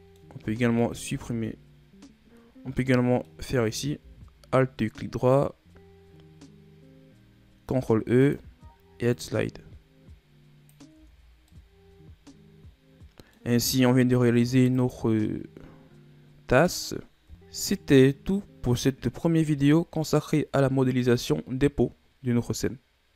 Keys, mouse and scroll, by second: 0.9 alt+right click, 3.1-4.1 middle drag, 4.1 ctrl+e, 7.8 ctrl+e, 11.1 Tab, 11.3-11.7 scroll down 3, 11.7-14.7 middle drag, 14.9 click, 17.3-17.6 middle drag, 17.6-18.2 scroll up 2, 18.2-19.2 middle drag, 19.2-19.5 shift+scroll up 2, 20.0 scroll up 1, 20.1-23.1 middle drag.